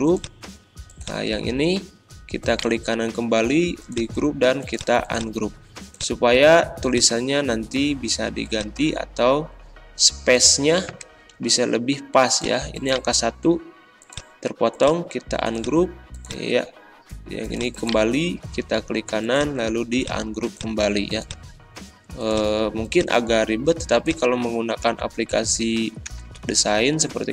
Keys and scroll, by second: 10.9 2, 25.0 Up, 27.2 Down.